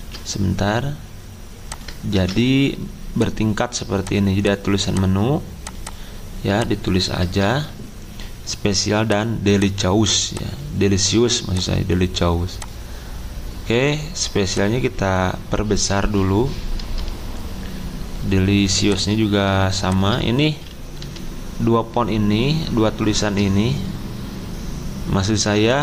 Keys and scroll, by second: 0.0 ctrl+z, 2.1 ctrl+v, 7.3 BackSpace, 21.0 c.